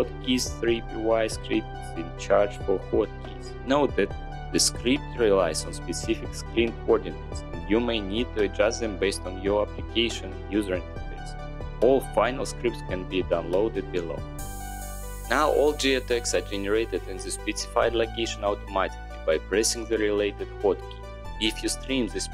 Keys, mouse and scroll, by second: 2.9 click, 3.9 right click, 4.6 scroll, 4.7 middle click, 4.8 middle click, 8.9 4, 9.0 scroll, 10.0 click, 10.2 click, 10.3 click, 10.6 click, 10.7 click, 14.7 click, 18.0 click, 20.6 click, 20.8 click.